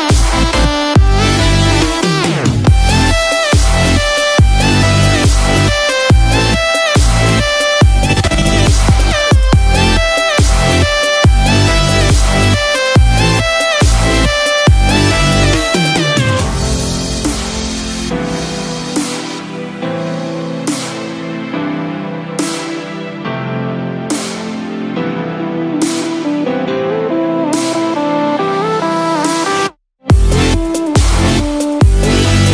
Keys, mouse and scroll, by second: 1.6 ctrl+z, 2.6 click, 5.7 Tab, 7.2 Tab, 9.3 click, 11.2-11.7 scroll down 2, 11.6 middle click, 14.0-14.6 scroll up 4, 14.6 middle click, 16.0 scroll down 3, 16.1 middle click, 16.5 click, 17.7 g, 19.6 middle click, 21.1 middle click, 22.1 /, 22.8-23.2 scroll down 1, 23.5 middle click, 23.5-23.9 scroll down 2, 24.1 /, 24.7 middle click, 25.8 g, 29.5-30.0 scroll down 1, 30.2-30.7 scroll up 2, 30.7 shift+middle click, 31.1 middle click, 32.2 shift+middle click.